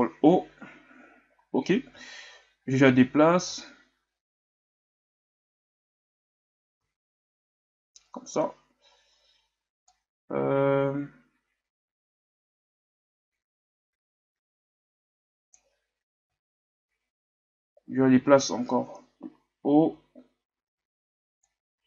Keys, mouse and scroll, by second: 2.2-2.6 shift+scroll up 3, 3.9-4.2 scroll down 2, 10.1-12.9 drag, 17.4 shift+scroll up 2, 19.8-21.6 shift+scroll up 7, 21.6-21.8 drag.